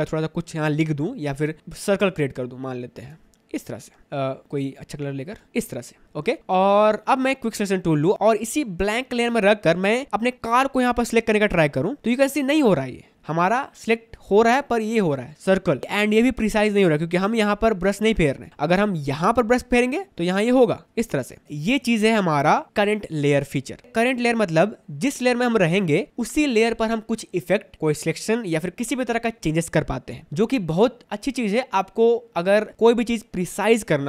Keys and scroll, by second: 1.2 1, 4.1 ctrl+z, 6.0 v, 19.3 ctrl+d, 21.4 space.